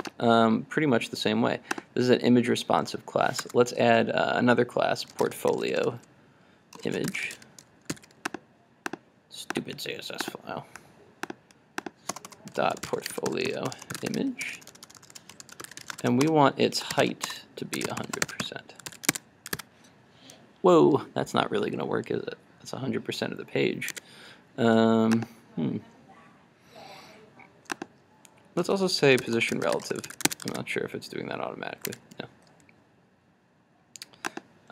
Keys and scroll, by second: 8.0 super+s, 19.1 super+s, 19.2 super+Tab, 19.6 super+r, 23.9 super+Tab, 30.1 super+s, 30.5 super+r, 32.0 super+Tab.